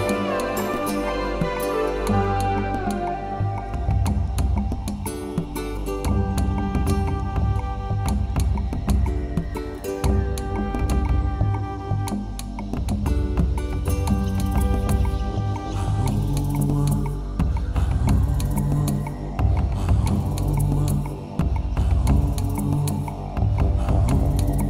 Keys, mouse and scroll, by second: 1.8 middle click, 2.3 shift+middle click, 2.7 middle click, 3.0 Tab, 3.2 middle click, 4.3 click, 5.2 alt+shift+click, 5.4 alt+shift+click, 6.1 scroll down 2, 6.8 KP_7, 7.3 shift+middle click, 9.5 s, 11.4 right click, 12.1 click, 13.3 s, 15.9 click, 16.0 middle click, 16.5-17.3 scroll up 4, 16.7 Tab, 17.3 shift+middle click, 17.6 middle click, 19.0 shift+middle click, 19.8 Tab, 21.0 click, 21.6 shift+click, 22.5 click, 22.8 shift+click, 23.5 shift+click, 23.5-24.1 scroll down 4, 24.1 middle click.